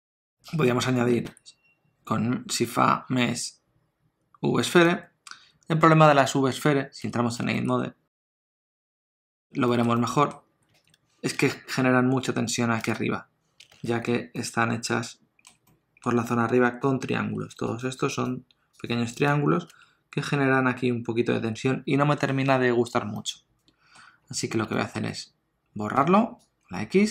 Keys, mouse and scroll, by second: 1.1 shift+a, 7.0 Tab, 7.6 shift+middle click, 7.8 scroll up 3, 8.3 shift+middle click, 8.6 middle click, 8.9 ctrl+middle click, 9.7 shift+middle click, 10.0 middle click, 10.8 alt+a, 14.4 ctrl+middle click, 15.7 middle click, 17.5 3, 17.7 click, 18.1 click, 18.8 click, 19.2 click, 19.7 Tab, 20.2 scroll down 2, 21.7-22.2 scroll down 4, 23.1 middle click, 24.2-24.7 scroll down 2, 24.7 shift+middle click, 25.9 x.